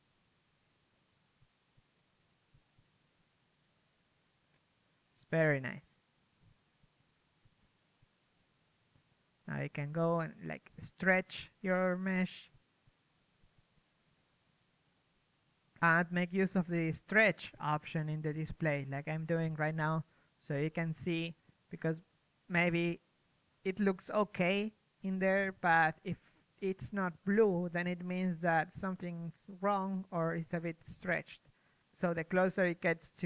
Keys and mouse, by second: 0.2 right click, 0.3 s, 1.9 s, 3.6 p, 3.9 s, 4.8 g, 5.5 s, 6.9 drag, 8.4 p, 8.6 s, 10.0 click, 11.1 p, 11.3 s, 13.1-15.0 typing, 15.8-19.7 drag, 18.1 p, 18.6 g, 19.9-21.2 drag, 19.9-22.3 typing, 23.6 g, 24.8 g, 25.6 g, 26.2 g, 26.9 click, 27.9 g, 28.6 click, 28.6 p, 28.8 g, 29.4 click, 29.5 s, 31.0 click, 31.4 a, 31.5 middle click, 31.5 a, 31.8-33.2 drag, 31.8 a.